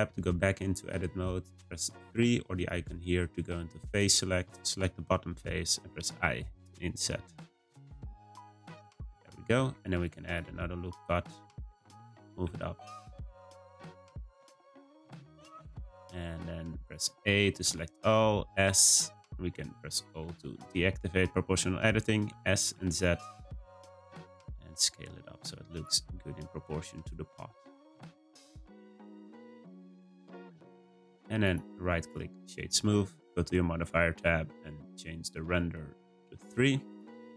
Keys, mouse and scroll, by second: 2.5-4.0 drag, 4.7-5.8 middle drag, 5.8 i, 8.0-9.7 middle drag, 9.8 r, 12.4 s, 14.8-15.2 scroll down 3, 15.2-16.5 middle drag, 16.5-16.8 scroll down 1, 16.8 middle click, 17.2 a, 17.6 s, 20.1 o, 22.3 s, 24.4 s, 26.4-28.4 shift+middle drag, 28.4 s, 29.0 s, 30.2 Tab, 30.6 middle click, 31.4-33.2 right drag, 33.2 click, 36.0-37.0 drag, 37.2 click.